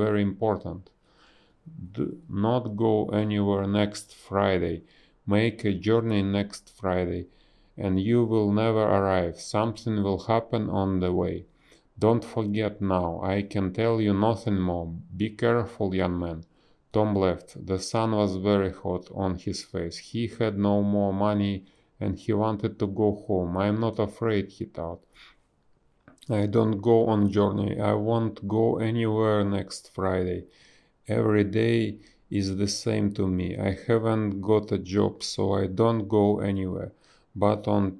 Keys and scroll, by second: 0.3 space, 1.4 ctrl+z, 2.4 ctrl+z, 2.8 ctrl+z, 3.0 b, 7.3 space, 7.8 space, 9.1 a, 11.4 space, 12.1 space, 16.1 space, 16.3 b, 17.5 ctrl+z, 18.7 ctrl+z, 22.5 a, 28.6 space, 29.2 space, 30.9 space, 33.3 space, 33.6 b, 35.5 ctrl+z, 36.0 ctrl+z, 37.2 ctrl+z.